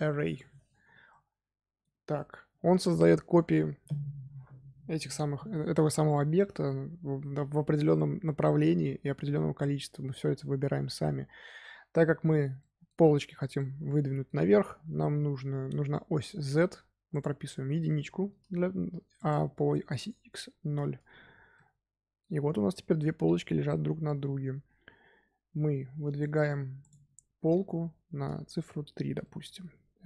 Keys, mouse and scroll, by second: 0.9 scroll down 1, 1.0-4.1 middle drag, 5.8-10.9 middle drag, 12.5-16.6 middle drag, 17.0-21.5 drag, 21.5-23.4 middle drag, 23.4 KP_1, 26.7-29.2 drag, 29.2-30.0 middle drag.